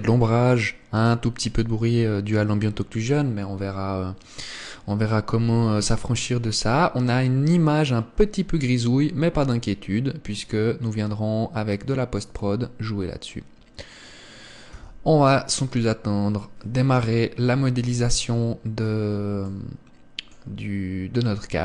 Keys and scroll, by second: 15.4 Escape, 18.4 KP_1.